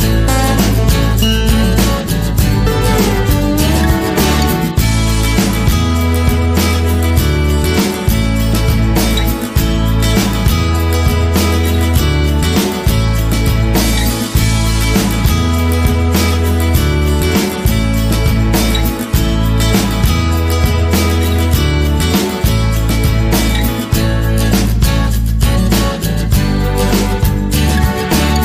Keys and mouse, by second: 0.1 g, 1.3 s, 2.5 KP_1, 3.1 g, 5.4 g, 7.5 KP_3, 8.1 g, 9.6 s, 10.4 g, 11.9 middle click, 12.8 ctrl+r, 13.7 middle click, 14.6 right click, 15.6 middle click, 16.6 shift+right click, 16.9 middle click, 18.2-20.2 drag, 20.2 middle click, 20.7 KP_3, 21.1 shift+middle click, 22.9 middle click, 23.5 right click, 24.1 KP_3, 25.0 e, 25.9 s, 27.4 g.